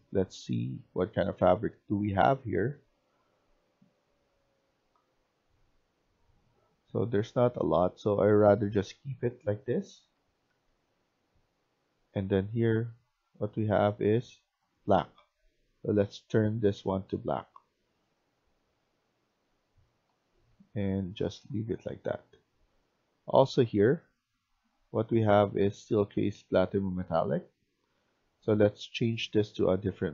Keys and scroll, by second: 9.5-11.1 typing, 20.0 s, 20.4 w, 21.1 s.